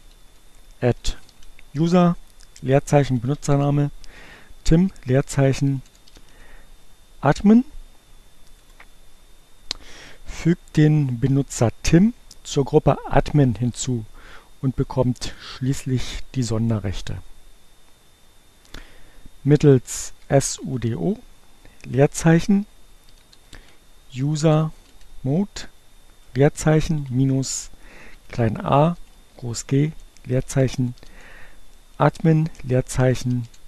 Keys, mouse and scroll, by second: 0.3-1.1 typing, 3.2 m, 5.4-6.4 typing, 8.8 Return, 20.2-21.1 typing, 22.8-23.9 typing, 25.6 space, 28.1 shift+a, 30.7 n, 33.3 i.